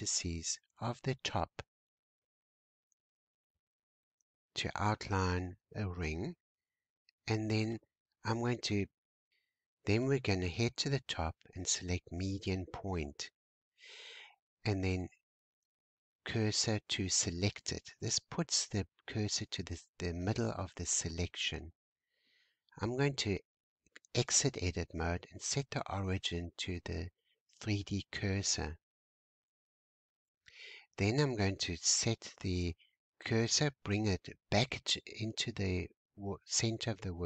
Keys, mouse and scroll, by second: 10.4-13.5 drag, 14.1 shift+s, 17.0-18.3 scroll up 5, 18.4-19.9 scroll down 2, 22.7 Tab, 23.7-26.9 right drag, 28.2-29.3 scroll down 2, 29.3 shift+s, 33.7-34.3 scroll up 1, 36.5 shift+s.